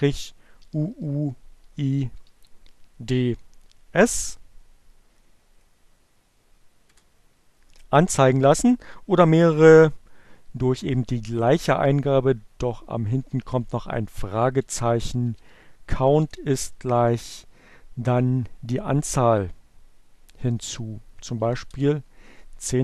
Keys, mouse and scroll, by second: 1.6-2.5 typing, 4.8 Return, 9.6 Up, 12.6 c, 14.4-16.0 typing, 19.6-20.5 typing.